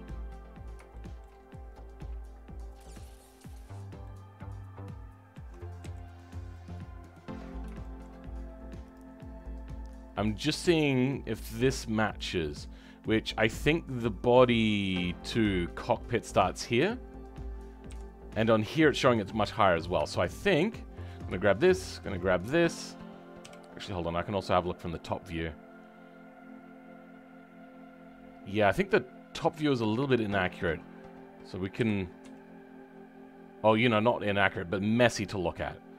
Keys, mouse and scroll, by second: 0.4-0.9 scroll up 1, 0.9 shift+middle click, 1.4-3.0 scroll up 2, 3.0-4.0 scroll down 3, 4.0-5.8 middle drag, 5.8 KP_1, 7.0-7.8 scroll up 4, 7.8-8.8 shift+middle drag, 8.8-17.0 drag, 17.0-17.8 scroll down 3, 17.8 KP_3, 19.5-20.0 scroll up 6, 20.0-21.0 shift+middle drag, 21.0 click, 23.4 KP_7, 23.9 scroll down 2, 25.5-29.6 scroll up 2, 29.6-31.8 shift+middle drag, 31.8 g.